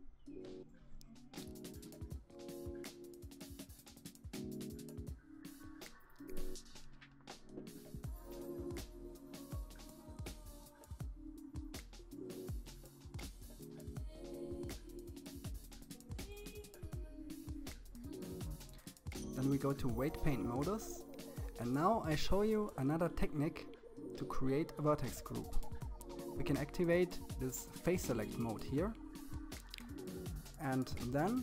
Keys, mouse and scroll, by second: 0.0 click, 0.8-1.3 scroll up 7, 2.1-4.7 drag, 9.5-10.8 drag, 12.2 click, 19.0-23.9 drag, 28.4 click, 29.7 alt+a, 31.1 KP_1.